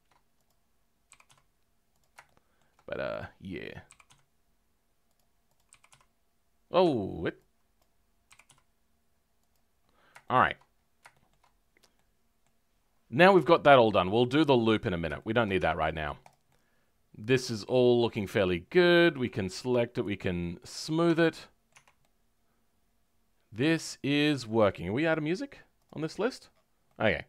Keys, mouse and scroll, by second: 11.9-14.1 middle drag, 14.1-15.1 drag, 15.1 shift+middle click, 15.5 Tab, 15.9 middle click, 16.2 click, 16.4-19.2 middle drag, 19.2 click, 21.0 Tab, 21.2 middle click, 21.7 Tab, 21.9-27.2 middle drag.